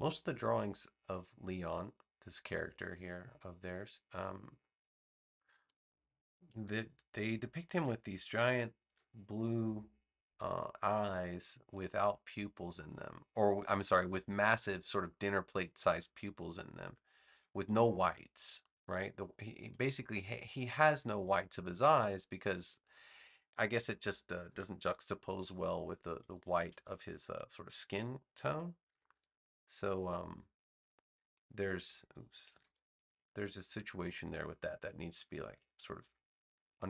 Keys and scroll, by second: 7.7 super+c, 8.8 super+v, 28.8 super+g, 32.6 super+z, 33.3 super+z.